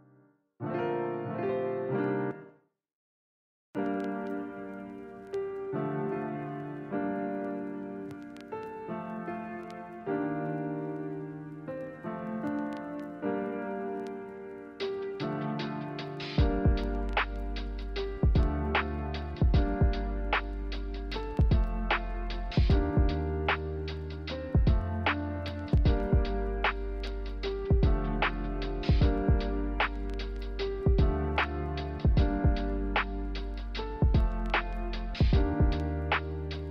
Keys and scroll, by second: 17.4 ctrl+z, 17.6 ctrl+z, 18.6 ctrl+z, 22.6-24.1 typing, 27.8 typing.